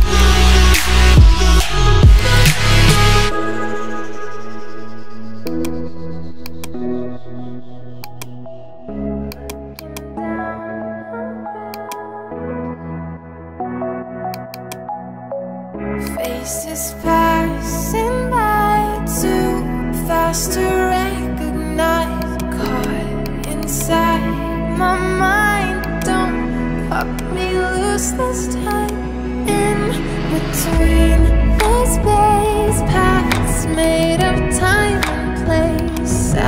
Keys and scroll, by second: 6.0 [.